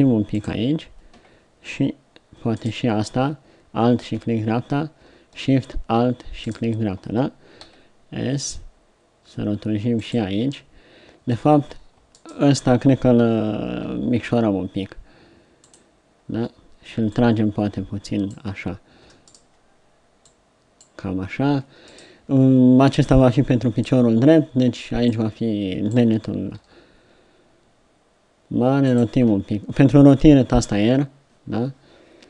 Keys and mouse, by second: 7.7 click, 7.7 s, 13.7 click, 13.7 s, 17.2-18.4 drag, 20.3-22.1 middle drag, 26.5 r, 30.9 r.